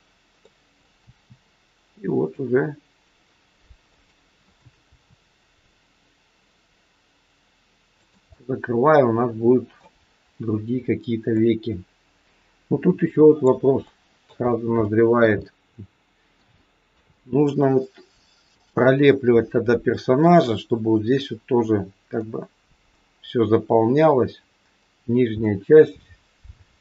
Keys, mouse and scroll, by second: 0.4 middle click, 1.0 r, 4.9 r, 8.3 middle click, 13.7 shift+middle click, 14.4-14.7 scroll up 1, 14.9 shift+middle click, 15.4 middle click, 16.5 shift+scroll up 1, 16.6 shift+middle click, 17.1 middle click, 25.4 middle click.